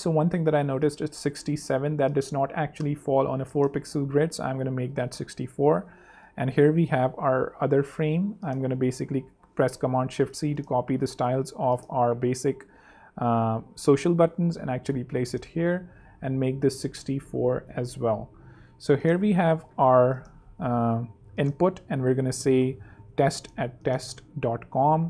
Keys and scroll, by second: 1.9 super+Up, 3.0 super+3, 3.9 super+2, 9.1 alt+super+c, 12.2 super+v, 13.8 super+3, 14.8 super+2, 15.7 shift+super+2, 16.0 shift+super+Down, 17.1 shift+super+Up, 18.9 super+space, 19.5 space, 19.8 t, 22.8-24.9 typing.